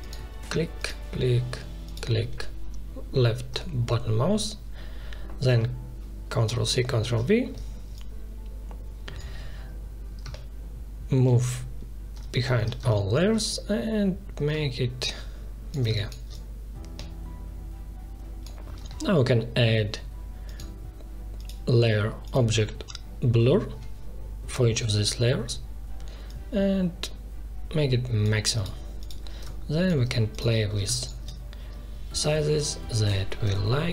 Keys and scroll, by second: 6.5 ctrl+c, 7.0 ctrl+v, 11.2 ctrl+shift+[, 12.8 space, 15.8 space, 30.8 space.